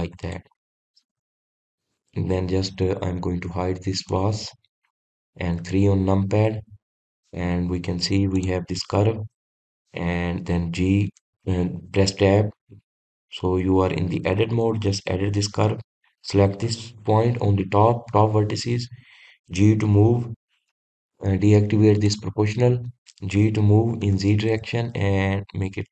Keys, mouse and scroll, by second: 1.3 click, 1.7 scroll up 1, 2.3-3.2 middle drag, 3.2 click, 5.2 click, 5.6-6.7 scroll down 1, 6.7 KP_3, 7.7-8.4 scroll up 2, 9.4 click, 12.2 Tab, 13.7-14.9 scroll up 2, 14.9-15.8 scroll down 1, 15.8-17.0 shift+middle drag, 17.0 click, 23.2 click.